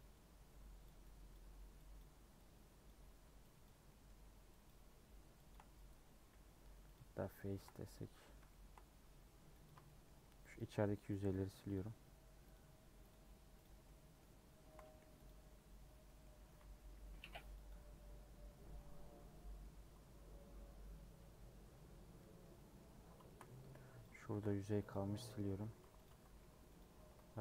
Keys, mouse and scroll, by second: 1.3 shift+click, 1.9 shift+click, 2.8 shift+click, 3.6 shift+click, 3.8 shift+middle click, 4.6 shift+click, 5.5 shift+click, 6.9 x, 7.3 shift+middle click, 7.7 scroll down 1, 7.9 middle click, 8.9-9.6 scroll up 1, 9.6 click, 9.8 shift+middle click, 10.5 shift+click, 11.3 shift+click, 11.7 shift+click, 12.5 shift+click, 13.1 shift+click, 13.6 shift+click, 13.8-15.2 shift+middle drag, 15.2 x, 15.6 scroll down 2, 16.0 middle click, 16.4 a, 17.6 u, 18.2 scroll up 2, 18.9-20.9 middle drag, 20.9-21.2 scroll down 1, 21.2 Tab, 21.7 Tab, 22.0 scroll up 1, 22.1 middle click, 22.9 2, 23.2 shift+middle click, 23.5 3, 24.0 Left, 24.9 x, 25.7 2, 27.3 ctrl+x.